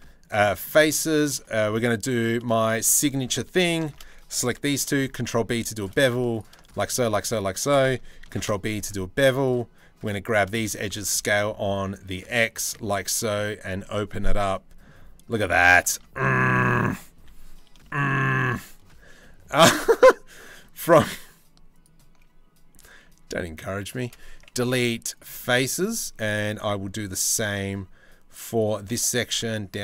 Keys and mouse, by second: 0.9 ctrl+r, 2.4 ctrl+r, 4.4 ctrl+b, 6.6 click, 6.9 click, 7.9 ctrl+b, 10.2 middle click, 10.5 s, 12.5 click, 12.8 middle click, 13.4 middle click, 14.0 Tab, 14.3-15.5 middle drag, 15.5 Tab, 16.8 3, 21.4 alt+click, 23.4 alt+shift+click, 24.2 Delete, 25.0 click, 26.3 middle click, 29.4 middle click.